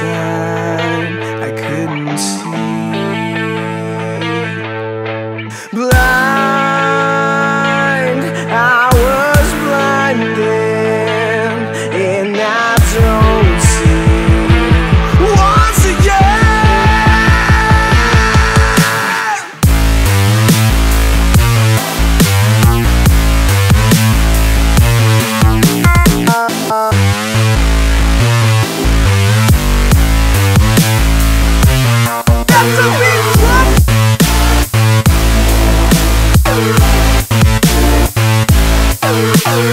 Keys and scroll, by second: 11.7 alt+z.